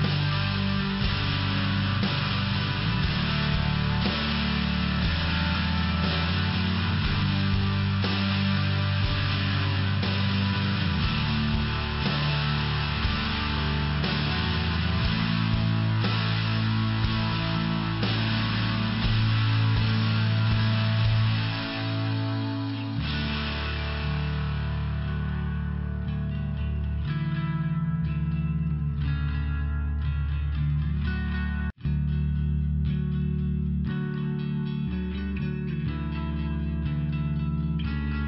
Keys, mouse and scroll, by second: 0.6 click, 0.7 click, 2.2 click, 2.3 click, 2.7 click, 2.8 click, 3.2 click, 3.3 click, 3.6 click, 3.8 double click, 4.4 double click, 5.2 click, 5.3 click, 5.7 click, 5.8 click, 6.4 click, 6.5 click, 7.2 click, 7.3 click, 8.2 click, 8.2 click, 8.8 click, 10.8 click, 11.0 click, 11.5 click, 11.6 click, 12.0 click, 12.1 click, 12.4 click, 12.5 click, 12.9 click, 13.0 click, 13.5 click, 13.5 click, 14.1 click, 14.3 click, 14.7 click, 14.8 click, 15.3 click, 15.3 click, 16.0 click, 16.1 click, 16.5 click, 16.7 click, 17.1 click, 17.1 click, 17.8 click, 20.1 click, 20.2 click, 20.8 click, 20.9 click, 21.2 click, 21.3 click, 21.6 click, 21.8 double click, 22.1 double click, 22.2 double click, 22.7 click, 22.9 click, 23.4 click, 23.5 click, 24.3 click, 24.4 click, 24.8 click, 24.9 click, 25.8 click, 25.9 click, 26.4 click, 26.5 click, 27.1 click, 27.2 click, 27.9 click, 28.0 click, 28.7 click, 31.0 click, 33.7 click, 33.8 click, 35.7 click, 35.9 click, 36.2 click, 36.4 double click, 36.7 double click, 36.9 double click, 37.2 double click, 37.4 double click, 37.9 click.